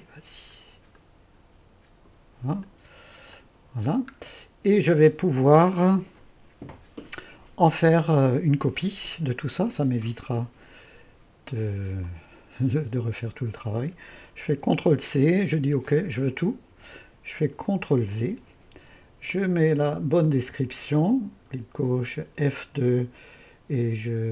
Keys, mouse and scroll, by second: 0.0-4.0 drag, 4.0-4.9 scroll down 1, 5.4 1, 7.7-9.9 drag, 7.7-8.5 typing, 12.1-14.5 drag, 14.8 ctrl+c, 15.9-19.2 drag, 18.2 ctrl+v, 20.3-22.3 drag, 22.3 F2.